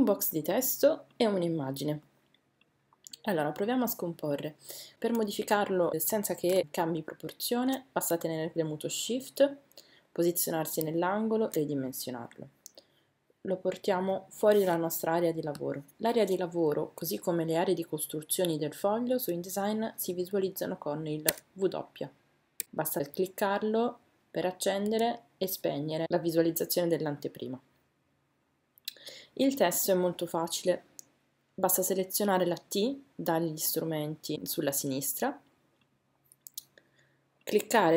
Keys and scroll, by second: 4.9 Caps_Lock, 6.6 shift+-, 24.8 w.